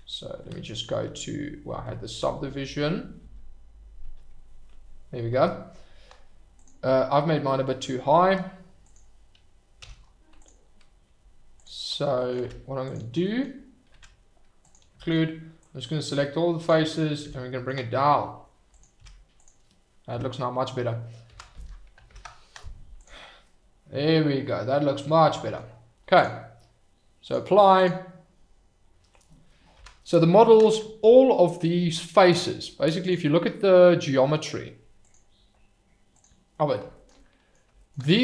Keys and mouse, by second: 0.5 ctrl+z, 0.9 ctrl+z, 2.2 ctrl+z, 4.2 ctrl+z, 4.3 ctrl+z, 8.8 click, 9.8 h, 10.4 click, 12.4 Tab, 13.9 Tab, 15.1 shift+middle click, 15.6-16.6 drag, 17.2 g, 18.7 click, 18.9 Tab, 20.1 KP_Divide, 21.3 KP_Divide, 22.1 alt+h, 23.4-24.9 middle drag, 26.1 click, 27.2-28.8 drag, 29.7 KP_Divide, 30.3 drag, 35.1 click, 36.1 click, 37.1-37.5 middle drag.